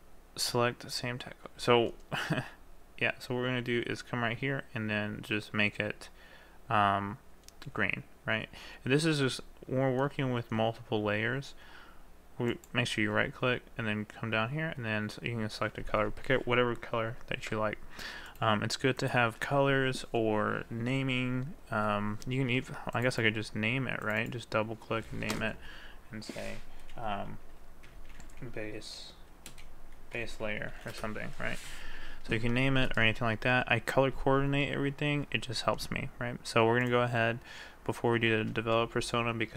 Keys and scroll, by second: 29.5 space, 30.8 r.